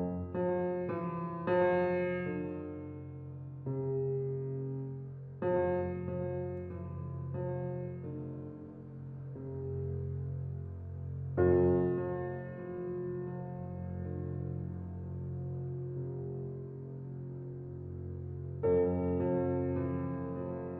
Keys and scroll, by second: 13.0 [.